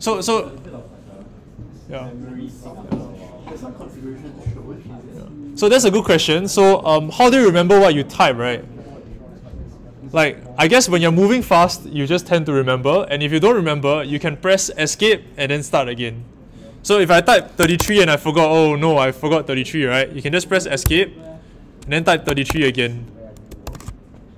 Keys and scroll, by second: 17.6 typing, 20.8 Escape, 21.6 Escape, 22.2 typing, 23.6 shift+g.